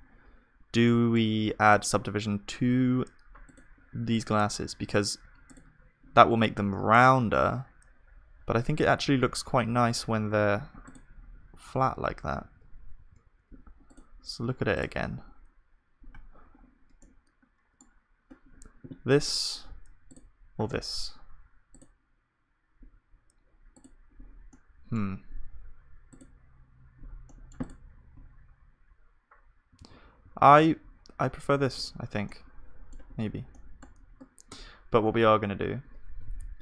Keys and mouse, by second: 9.7 ctrl+z, 12.4 ctrl+shift+z, 13.1 ctrl+z, 24.5-27.1 drag, 27.4-29.8 drag, 28.1-29.8 right drag, 29.8 ctrl+z, 31.6 ctrl+s, 34.6 Tab, 34.6-36.6 middle drag.